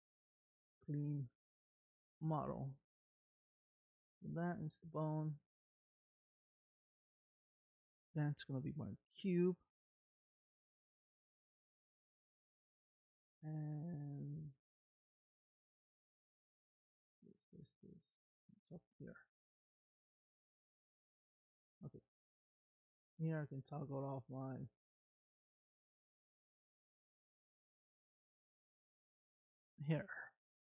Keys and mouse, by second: 0.5 click, 2.6 click, 3.5 click, 7.6 click, 8.1 click, 9.0 click, 15.9 click, 19.0 click, 21.6 click, 22.5 click, 22.9 click, 23.3 click, 25.1 click, 26.3-27.3 middle drag, 29.4 shift+middle click.